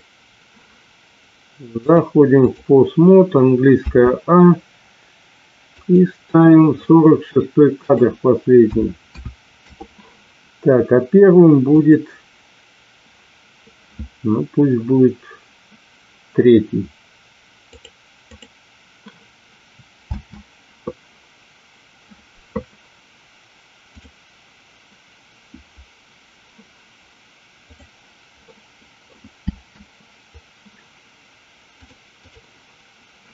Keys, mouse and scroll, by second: 1.9-2.9 drag, 4.0 a, 5.9 click, 7.9-9.8 drag, 12.0 click, 17.6 click, 18.3 click, 20.3 space, 27.8 drag, 28.6-29.5 middle drag, 29.8 space, 31.8-32.5 drag.